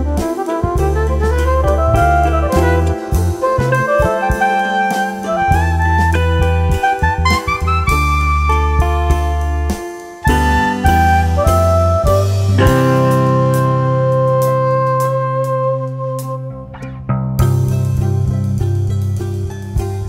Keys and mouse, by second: 0.0-0.2 typing, 0.5 click, 1.6-7.0 typing, 1.8 click, 2.2 click, 2.9 click, 3.6 click, 4.3 click, 5.1 click, 5.9 click, 6.4 click, 7.3 click, 8.8-12.4 typing, 8.9 click, 9.5 click, 10.1 click, 11.1 click, 11.5 click, 11.8 click, 12.4 click, 14.1 7, 14.4 click, 15.2-15.9 typing, 15.4 click, 16.2 click, 17.2-20.0 typing, 17.5 click, 18.0 click, 18.6 click, 19.7 click.